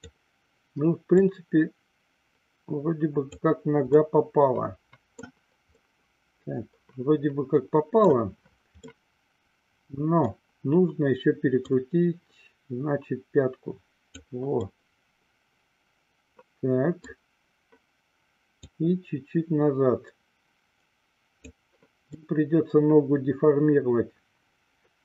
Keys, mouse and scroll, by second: 1.3-3.5 drag, 4.2-5.5 middle drag, 6.1-8.4 middle drag, 9.2-10.6 middle drag, 11.8-14.3 drag, 14.9-17.3 middle drag, 18.8-21.7 drag, 22.4-25.0 middle drag.